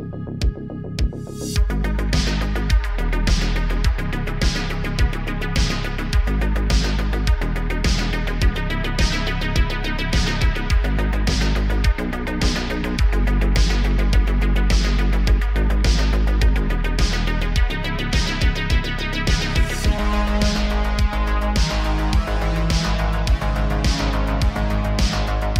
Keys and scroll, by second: 0.4-2.4 typing, 6.0 g, 6.7 s, 9.8 g, 10.7 r, 10.9 r, 12.0 r, 12.5 g, 13.7 g, 14.3 g, 17.1 g, 20.0 shift+d, 22.5 g, 24.9 s.